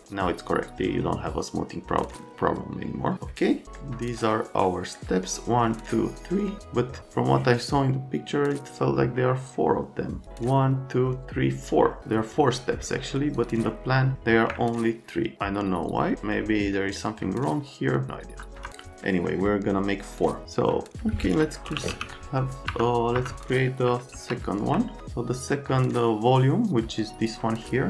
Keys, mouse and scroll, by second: 15.8 middle click, 18.2 F3, 19.1 middle click, 21.4-22.4 typing, 22.7 F3, 23.2 F3, 24.1 alt+z.